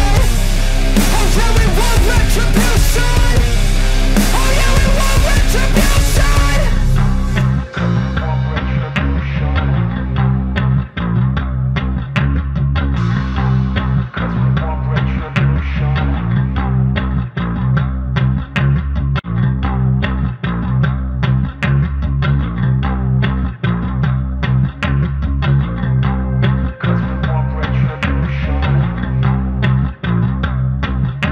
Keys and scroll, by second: 16.2-18.4 typing, 19.0 ctrl+=, 19.4 ctrl+=, 22.4 ctrl+alt+z, 22.8 ctrl+alt+z, 28.3 ctrl+alt+z.